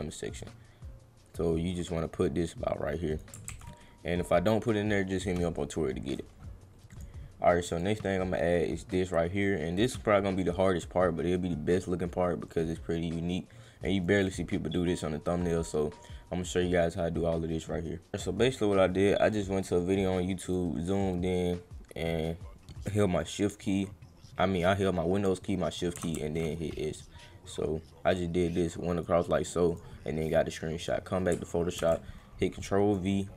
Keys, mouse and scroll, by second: 0.4-3.2 drag, 5.3 click, 6.9 click, 7.7 click, 12.5 click, 14.0 click, 19.3 click, 20.5 click, 26.1 shift+s, 27.4-29.0 drag, 29.7 click, 30.8 click, 31.8 ctrl+v, 32.6 click.